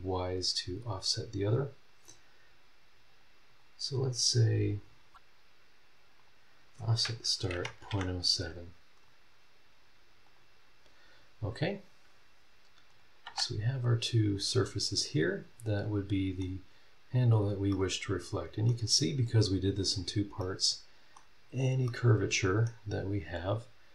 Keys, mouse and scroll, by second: 2.0 click, 3.0 click, 3.4 click, 6.1 click, 7.5 KP_Decimal, 7.6 KP_0, 7.9 KP_7, 10.2 click, 11.1 scroll down 1, 11.6 scroll up 1, 12.9 click, 13.2 middle click, 13.2 space, 13.8 scroll down 1, 14.2 click, 14.7 scroll down 1, 15.0 middle click, 15.0 right click, 15.9 scroll up 1, 16.8 scroll down 1, 17.2 scroll up 1, 17.7-18.8 middle drag, 17.8-18.8 right drag, 19.4 click, 20.0 scroll up 1, 20.4 middle click, 20.5 click, 21.0 right click, 21.4 scroll down 1, 21.8 middle click, 21.9 right click, 22.9-23.2 scroll up 2.